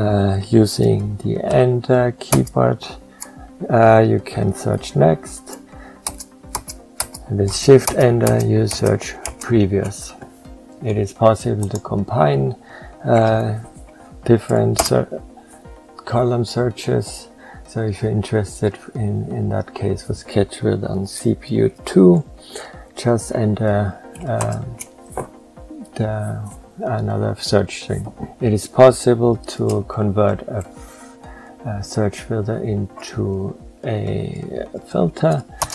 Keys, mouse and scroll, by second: 7.7 shift+Return, 24.2 shift+Return, 35.5 ctrl+Return.